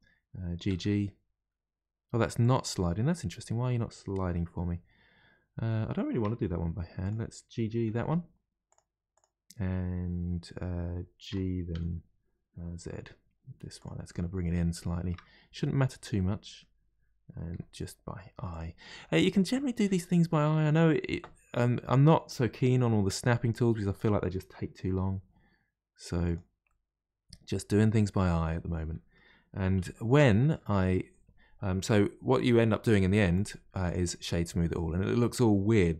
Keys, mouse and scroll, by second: 0.7 g, 2.8-4.2 middle drag, 4.2-4.7 scroll up 1, 4.7-6.3 scroll up 1, 6.6 1, 7.0 click, 7.8 g, 9.1 click, 11.3 g, 14.1-15.3 middle drag, 15.3-16.2 scroll down 1, 16.2-17.5 middle drag, 17.5 g, 18.9-23.5 middle drag, 23.5 click, 25.0 g, 26.6-28.2 middle drag, 28.2-28.8 scroll down 2, 28.8-30.7 middle drag, 30.7 Tab, 33.3-34.5 right drag, 34.5-35.9 middle drag.